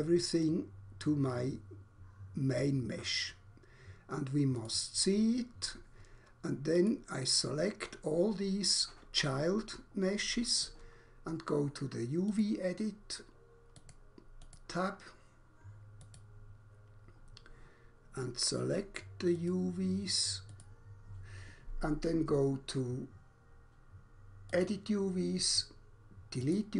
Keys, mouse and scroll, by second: 0.5 click, 2.7 click, 4.7 click, 6.8 click, 12.3 click, 14.5 click, 19.3 click, 20.5 click, 24.5 click, 26.5 click.